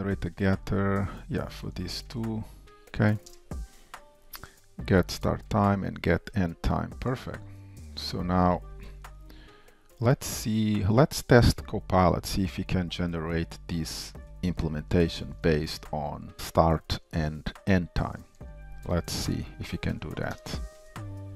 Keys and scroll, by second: 3.7 Down, 19.3 super+/.